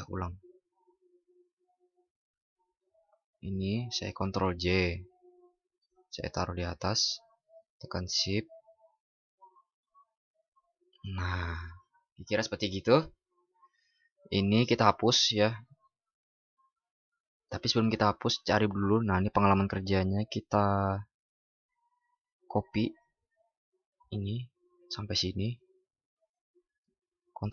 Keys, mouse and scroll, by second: 4.3 ctrl+shift+i, 27.2 ctrl+shift+b.